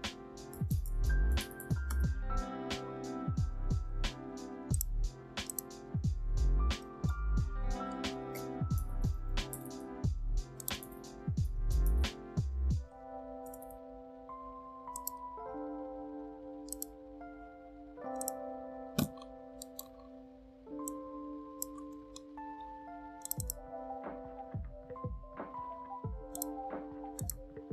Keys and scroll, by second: 0.0-1.6 typing, 1.8 Return, 7.8-9.4 typing, 9.4 ctrl+a, 11.0-13.9 typing.